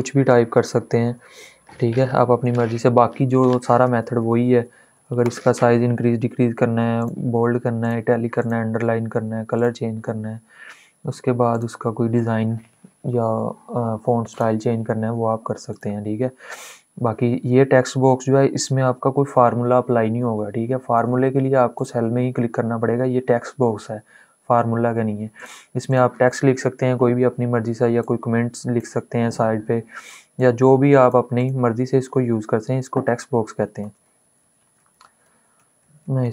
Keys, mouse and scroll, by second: 2.4 ctrl+a, 3.5 ctrl+shift+., 6.7 click, 14.1 click, 18.6-21.4 drag, 25.1 click, 25.2 click, 26.3 space, 27.7-31.1 drag.